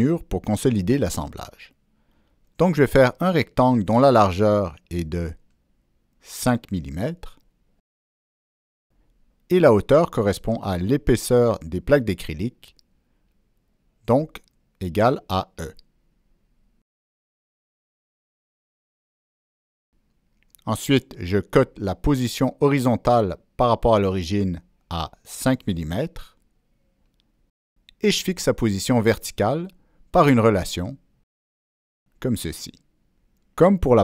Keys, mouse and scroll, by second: 1.8 click, 2.0 right click, 3.3 click, 3.8 right click, 4.8 click, 5.0 right click, 5.3 click, 6.7 Return, 9.2 click, 9.7 Return, 10.0 click, 13.5 Down, 13.5 Return, 13.5 click, 15.6 Down, 15.6 Return, 15.6 click, 18.3 click, 20.8 click, 22.2 click, 24.9 Return, 26.9 Escape, 26.9 Return, 28.2 click, 29.9 ctrl+Escape, 29.9 ctrl+click, 30.0 ctrl+Escape, 31.8 click, 33.0 click.